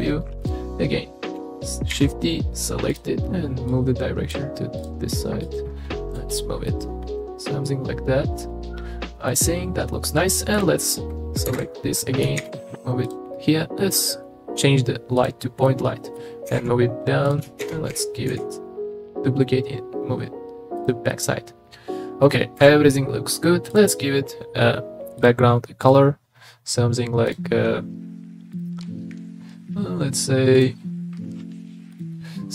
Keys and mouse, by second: 0.4 click, 1.9 shift+d, 2.9 click, 3.7 click, 4.8 click, 5.4 click, 6.3 click, 6.7-9.2 middle drag, 9.3 middle click, 11.4 KP_7, 12.4 shift+d, 15.2 click, 15.6 middle click, 16.5 g, 16.5 z, 17.2 click, 17.6 shift+d, 17.9 y, 18.3 x, 21.1-22.2 drag, 22.5 KP_0, 23.7 click, 25.2 click, 31.9 click.